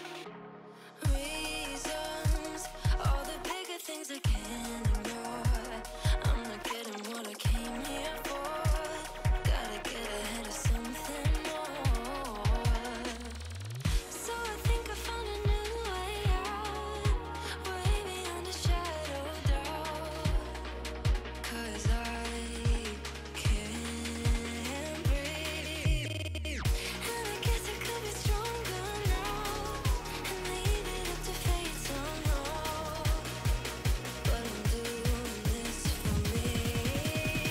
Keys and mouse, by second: 0.9 click, 2.4 click, 2.9 click, 3.3 click, 4.3 click, 6.0 click, 7.9 click, 9.4 click, 12.4 click, 13.3 ctrl+j, 14.8 click, 15.6 ctrl+z, 16.1 click, 16.7 shift+Up, 16.8 shift+Up, 17.3 shift+Up, 17.5 shift+Up, 17.7 shift+Up, 18.0 shift+Up, 18.2 shift+Up, 19.4 click, 19.9-21.4 typing, 21.6 Return, 22.1 alt+Tab, 23.0 alt+Tab, 25.6 click, 26.0 click, 27.0 click, 27.9 click, 28.1 3, 28.8 click, 29.4 click, 31.7 click, 33.3 click, 35.4 click, 36.0 click, 37.1 click.